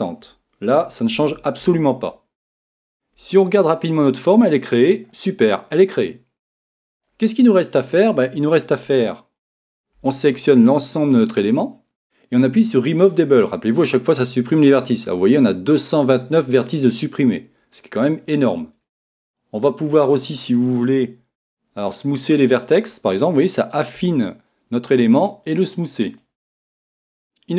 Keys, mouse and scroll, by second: 4.7-9.6 middle drag, 9.6 a, 10.0 a, 11.5 a.